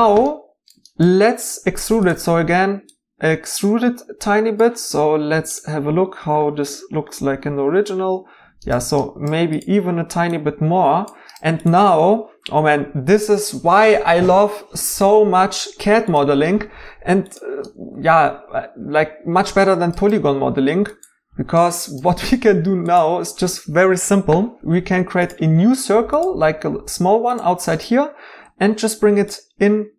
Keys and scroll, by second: 21.3 x, 28.6 g.